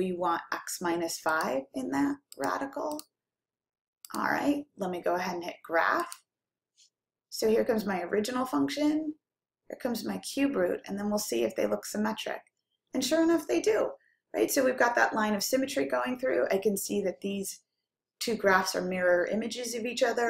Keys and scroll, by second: 1.6 x, 2.7 -, 3.3 5, 4.4 ), 9.1-9.9 typing.